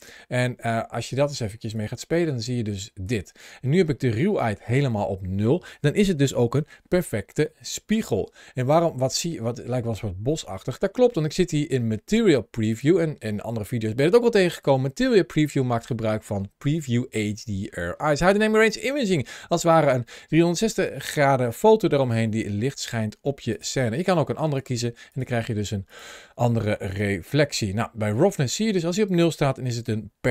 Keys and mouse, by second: 1.6-2.9 drag, 5.3-10.2 middle drag, 12.6-27.1 drag, 28.4-30.3 drag.